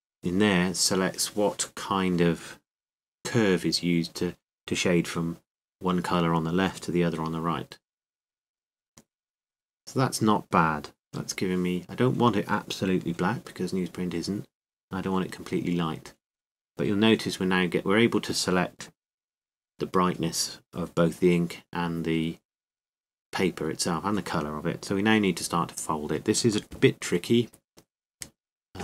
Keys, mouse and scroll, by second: 8.4-18.1 drag, 18.1 middle click, 18.9-23.0 drag, 22.9-24.8 middle drag, 25.5-28.8 drag, 27.0 Tab.